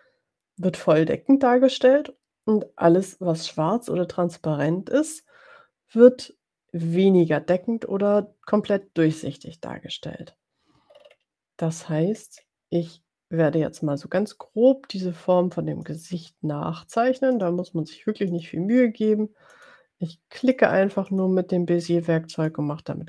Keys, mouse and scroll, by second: 7.3 click, 11.0-11.4 ctrl+scroll up 2, 12.4-12.7 scroll up 2, 16.0 click, 17.8 click, 18.8 click, 19.9 click, 20.9 click, 21.2 click, 22.8 click.